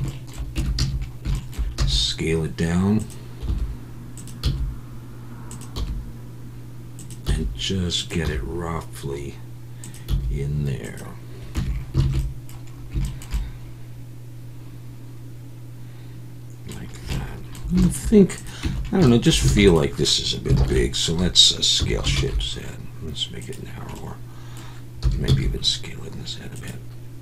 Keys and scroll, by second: 0.6 Tab, 0.8 a, 1.8 s, 3.5 g, 4.4 s, 5.8 g, 7.3 s, 8.2 g, 10.1 s, 11.6 Tab, 12.0 alt+a, 18.6 Tab, 19.5 alt+a, 20.6 ctrl+l, 21.8 s, 22.1 shift+z, 25.0 s, 25.3 z.